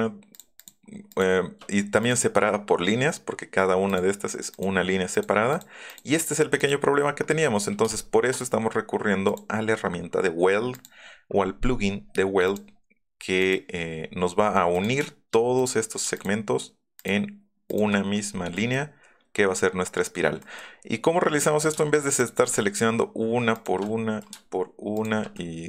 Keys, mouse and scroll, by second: 0.3 shift+click, 0.6 shift+click, 1.1 shift+click, 2.0 click, 3.8 click, 4.5 click, 6.6 click, 7.1 scroll up 1, 7.6 click, 9.2 click, 12.4 click, 13.4 click, 14.0 middle click, 14.7 click, 15.6 click, 16.1 shift+middle click, 17.0 shift+click, 17.7 shift+click, 18.7 middle click, 19.9 middle click, 20.4 middle click, 22.2 shift+middle click, 22.4 shift+click, 23.5 shift+click, 24.0-24.4 scroll down 2, 24.9 shift+click, 25.3 middle click.